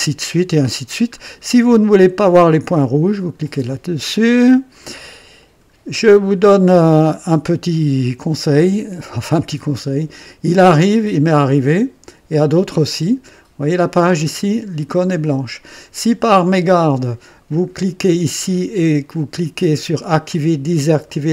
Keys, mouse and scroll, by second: 0.6 scroll up 1, 1.0 scroll down 2, 3.3 click, 5.3 click, 7.4 click, 10.7-13.9 drag, 17.5 right click.